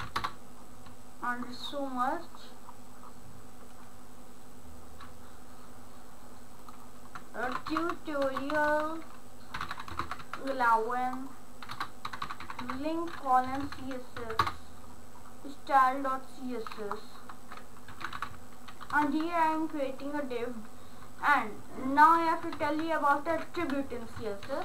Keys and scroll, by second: 0.2 Return, 7.2-10.7 typing, 11.8 Return, 11.9-13.1 typing, 13.5 Down, 14.2 Up, 14.4 Return, 17.7-19.4 typing, 21.1 BackSpace, 21.6 ctrl+Return, 22.3 Left, 22.6 Up, 23.3 Down, 23.6 Left, 24.2 Right.